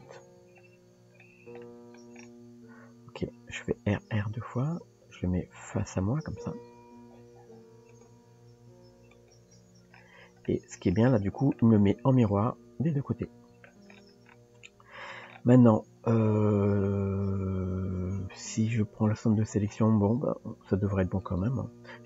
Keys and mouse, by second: 1.7 shift+middle click, 3.6 r, 9.6 Tab, 10.4-11.1 middle drag, 11.6-13.7 middle drag, 14.6 Tab, 20.8 Tab.